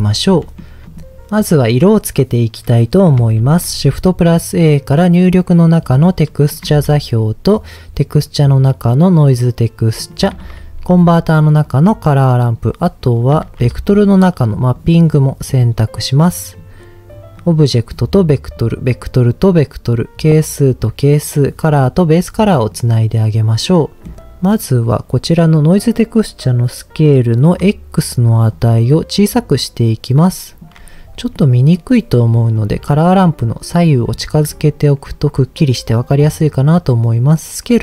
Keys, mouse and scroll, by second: 0.4 middle click, 3.3 shift+a, 6.7 shift+a, 10.4 shift+a, 12.8 click, 13.4 shift+a, 15.9 click, 17.3 click, 18.5 click, 19.9-20.9 drag, 21.7 click, 23.8 middle click, 28.5-30.6 shift+drag, 31.3 middle click, 32.5 click, 33.4 click, 34.1 click, 34.6 click, 36.0-37.8 drag.